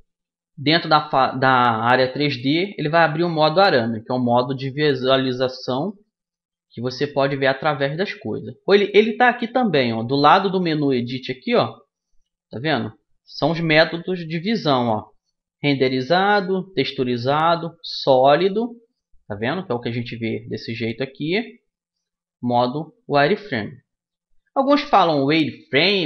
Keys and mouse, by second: 0.8 z, 1.8-7.9 middle drag, 13.1-15.0 drag, 18.9-20.3 drag, 20.7-22.5 drag, 24.3-26.0 middle drag.